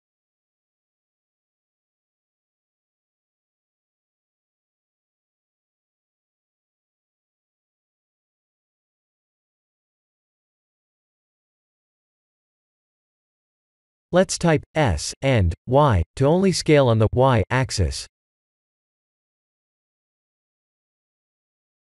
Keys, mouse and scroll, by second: 0.0 g, 2.2 r, 3.1 Tab, 6.2 shift+middle click, 6.7 middle click, 8.4 middle click, 8.6 shift+middle click, 9.2 middle click, 9.9 middle click, 10.2 Tab, 11.0 middle click, 11.5 middle click, 12.1 middle click, 12.5 KP_1, 12.5 KP_2, 12.7 KP_1, 13.7 KP_7, 14.6 shift+middle click, 15.1 shift+middle click, 15.5 click, 15.7 1, 16.4-16.9 scroll down 3, 16.9 shift+middle click, 17.8 b, 19.1 s.